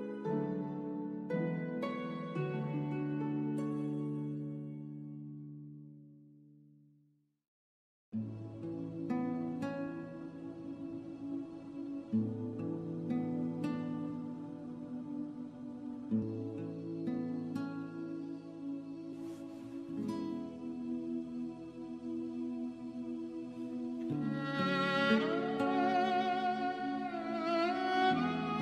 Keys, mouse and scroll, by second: 5.0 click, 5.6 right click, 7.8 click, 18.2 click, 19.0 KP_1, 19.7 KP_Enter, 20.8 click, 21.9-22.3 scroll down 1, 22.4 middle click, 23.4-24.0 scroll up 1, 24.0 right click, 26.2 click.